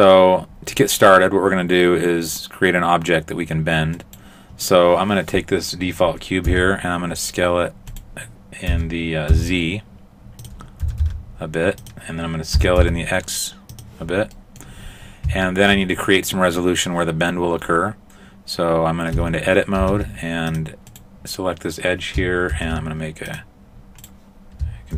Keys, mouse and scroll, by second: 4.0 right click, 6.5 s, 8.7 s, 10.9 s, 12.6 s, 14.4 middle click, 14.8-15.5 scroll up 4, 15.5 shift+middle click, 19.2 Tab, 19.9 ctrl+Tab, 20.9 right click, 22.6 ctrl+r, 24.0 right click, 24.0 click.